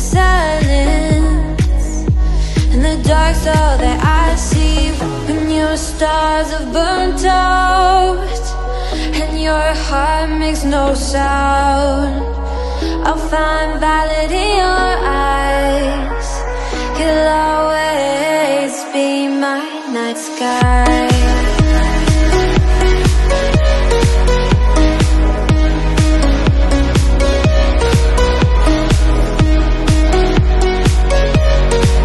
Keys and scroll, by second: 6.9 super+t, 28.3 super+t, 29.1 shift+Up, 29.4 shift+Up, 30.5 super+Up, 31.2 shift+Up, 31.5 shift+Up, 31.8 shift+Up.